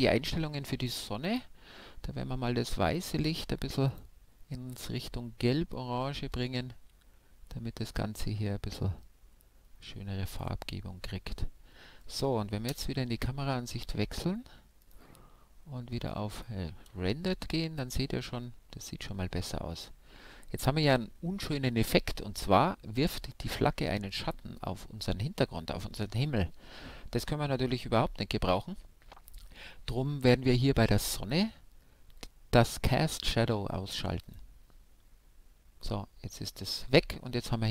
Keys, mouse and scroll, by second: 12.7 KP_0, 14.8-17.7 drag, 18.1-19.9 middle drag, 34.2-36.0 drag.